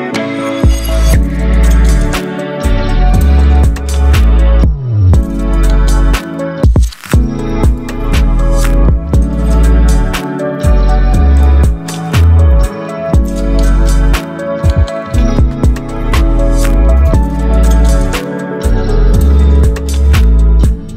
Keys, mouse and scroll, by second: 1.8 right click, 3.3 click, 8.7 ctrl+x, 9.7 ctrl+v, 11.1 v, 11.9-14.1 drag, 18.4 p, 19.9-20.9 drag.